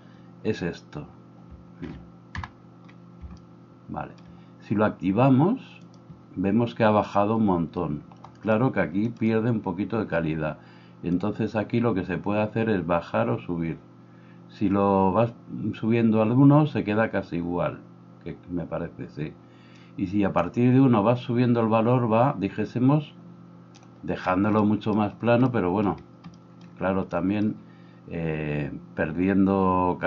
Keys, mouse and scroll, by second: 2.4-11.2 middle drag, 2.4 n, 11.2-30.0 drag.